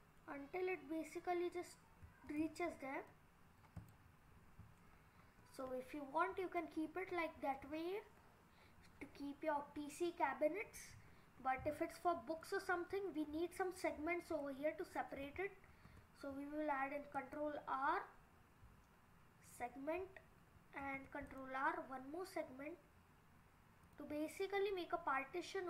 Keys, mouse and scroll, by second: 2.6-3.4 scroll down 3, 3.1 middle click, 3.8 click, 4.2-5.6 scroll up 9, 5.8-6.6 scroll down 5, 6.6 middle click, 11.0 scroll up 5, 11.7 scroll down 2, 12.4 middle click, 14.4 middle click, 15.7 ctrl+r, 20.8 ctrl+r.